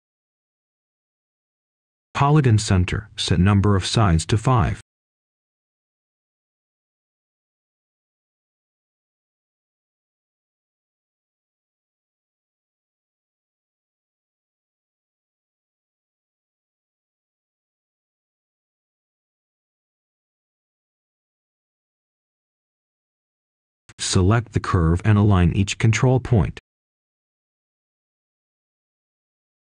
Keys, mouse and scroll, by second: 10.3 5, 11.0 Return, 13.0-14.6 scroll up 1, 14.6 click, 15.0-19.8 scroll down 1, 19.8-21.1 scroll up 1, 21.1 click, 21.6-22.6 scroll down 1, 22.6 right click, 24.1 click, 24.6 right click, 25.2 click, 26.0-27.2 scroll up 1, 27.2-29.5 drag, 29.5 scroll down 1.